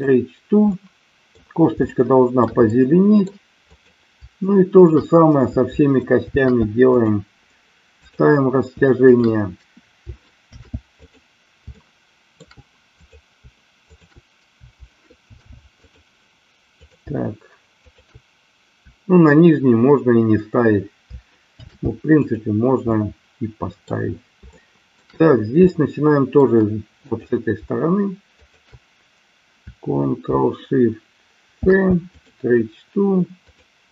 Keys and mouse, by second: 0.0 ctrl+shift+c, 0.7 middle click, 2.0 shift+middle click, 2.8 middle click, 3.6 click, 4.6 shift+click, 6.2 ctrl+shift+c, 9.0 click, 10.3 ctrl+shift+c, 11.8-12.3 middle drag, 13.8 shift+click, 15.2 ctrl+shift+c, 16.7-17.3 drag, 17.8 shift+click, 21.5 ctrl+shift+c, 22.8-23.8 middle drag, 24.5-25.0 shift+middle drag, 25.7-26.3 middle drag, 27.1 click, 28.3-28.8 shift+drag, 31.5 ctrl+shift+c, 33.3-33.9 drag.